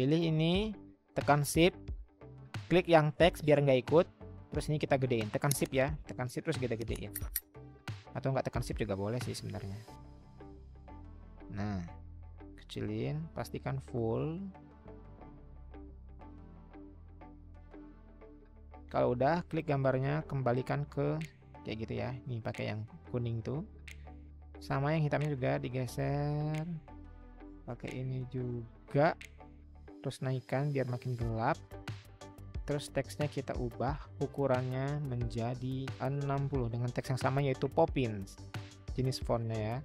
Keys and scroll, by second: 36.1-36.9 typing.